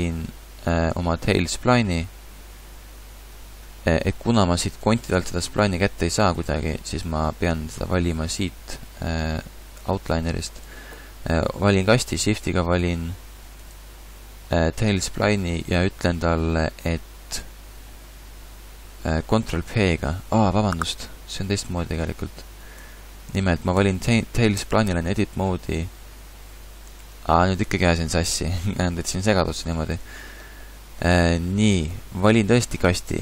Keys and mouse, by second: 1.6-3.5 right drag, 22.8 a, 24.6 Tab, 26.9 Tab, 32.3-33.2 right drag.